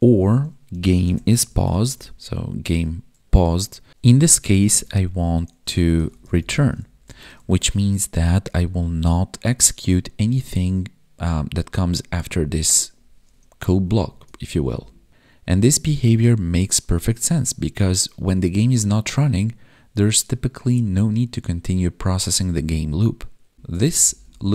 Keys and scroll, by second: 2.7 Tab, 7.4 ctrl+s, 13.9 Down, 14.4 ctrl+Up, 23.5 ctrl+Up.